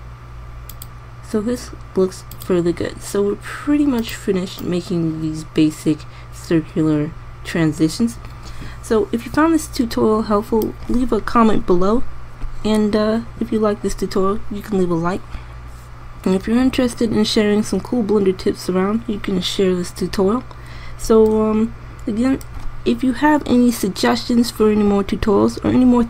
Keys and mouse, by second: 22.4-26.0 middle drag.